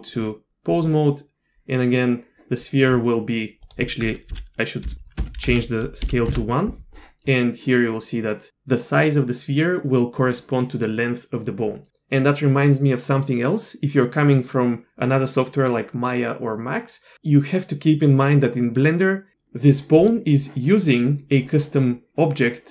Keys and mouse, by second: 0.1 d, 0.2-0.8 drag, 3.6-7.0 drag, 5.5 BackSpace.